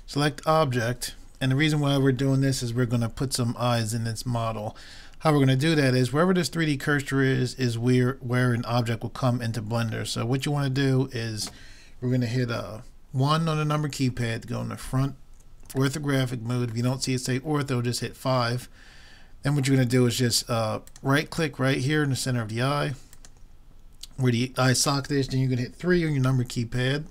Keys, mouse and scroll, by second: 14.0 KP_1, 20.9-22.7 right drag, 23.1-24.9 right drag, 26.5 KP_3.